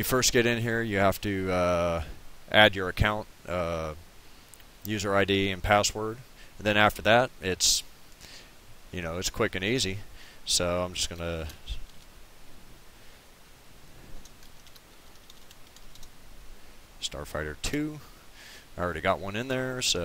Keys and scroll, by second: 11.0-12.4 typing, 14.2-16.3 typing, 17.7 2.